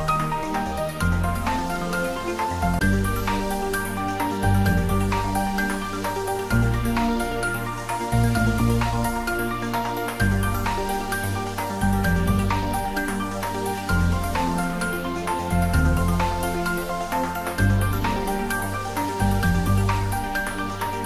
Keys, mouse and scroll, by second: 3.0 shift+z, 4.7 shift+z, 6.0 shift+z, 11.5 click, 15.1 shift+click, 16.4 x, 16.8 click, 19.2 scroll up 1, 20.8 click.